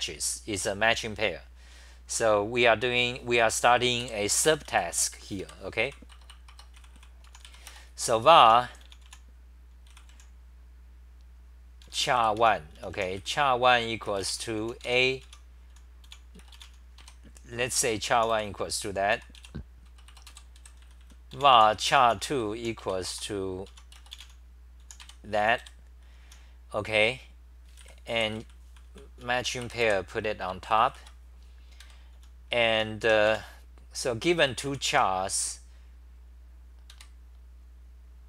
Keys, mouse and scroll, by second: 4.0 3, 5.4 ctrl+g, 5.7 c, 5.8 c, 6.1 Return, 6.3 Return, 6.5 Return, 6.8 c, 6.9 c, 8.2-9.6 typing, 12.4 Home, 12.7-14.6 typing, 16.1 Home, 16.1-25.9 typing, 20.1 Return, 23.7 Home, 27.6-30.3 typing, 30.9 ctrl+c, 31.8 ctrl+g, 32.2-35.5 typing, 36.9 ctrl+g.